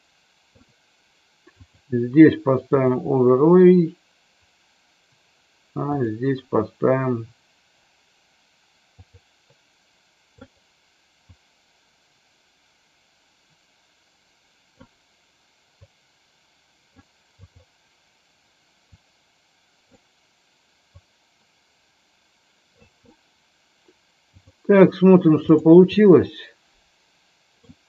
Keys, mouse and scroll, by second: 25.9-27.7 middle drag.